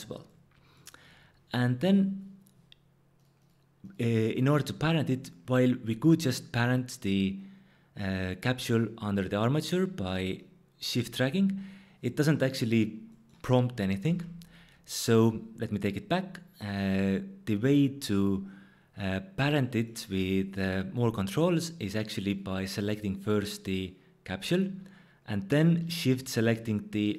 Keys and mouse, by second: 3.4 click, 10.4 shift+click, 14.1 ctrl+z, 22.3-23.8 drag.